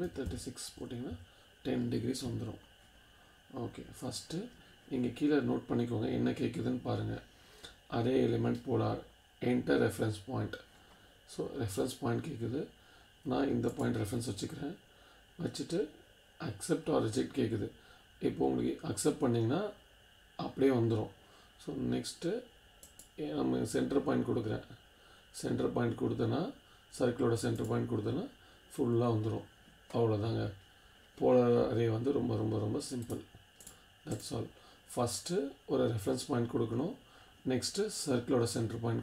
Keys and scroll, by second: 0.0-1.1 typing.